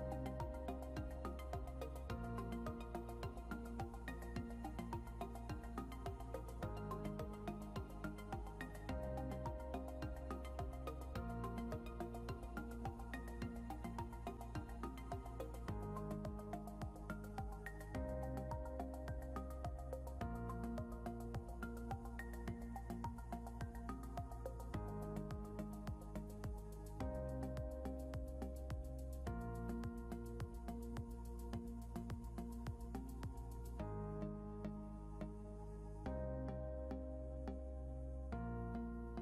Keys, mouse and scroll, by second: 0.0 scroll up 1, 0.8 click, 2.2 scroll down 1, 3.0 click, 3.2 scroll down 1, 4.7 click, 7.6 scroll up 1, 8.3 click, 10.5 scroll up 1, 11.2 click, 16.6 scroll down 1, 17.2 click, 18.2 ctrl+l, 21.4 click, 22.8 ctrl+click, 24.4 right click, 25.8 scroll down 1, 26.4 click, 29.2 scroll up 1, 29.6 click, 30.7 scroll down 1, 31.5 click, 31.9 scroll up 1, 32.5 click, 34.0 scroll down 1, 35.0 click, 38.5 ctrl+g.